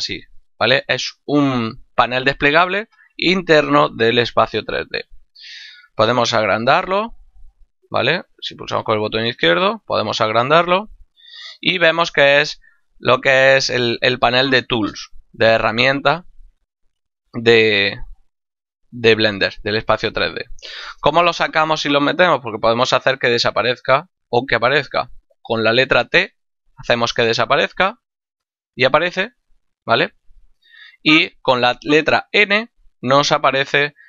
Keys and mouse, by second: 7.1 click, 25.8 t, 32.5 n.